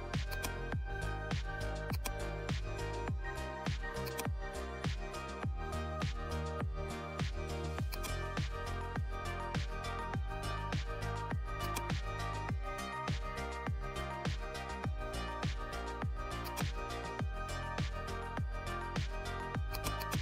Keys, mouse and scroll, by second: 11.5 click, 11.5 click, 14.9 right click, 16.4 click, 19.6 click, 19.7-20.2 drag.